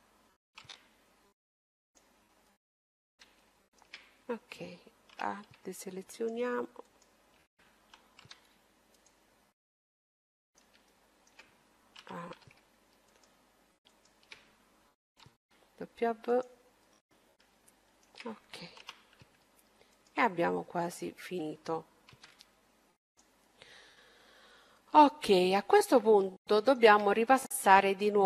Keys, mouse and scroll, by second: 0.5 w, 2.4-5.8 middle drag, 4.9 a, 5.9-8.6 right drag, 8.0 w, 9.4-12.6 middle drag, 11.7 a, 13.1-15.8 right drag, 15.2 w, 16.7-19.3 middle drag, 18.5 a, 19.6-22.6 right drag, 22.0 w, 23.6-27.9 middle drag.